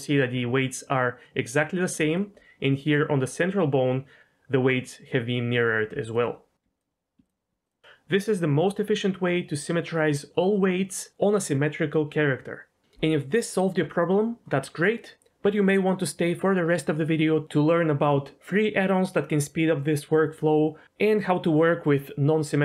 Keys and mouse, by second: 2.1 ctrl+click, 6.1 ctrl+click, 6.8 ctrl+click, 7.2 ctrl+click, 7.6 ctrl+click.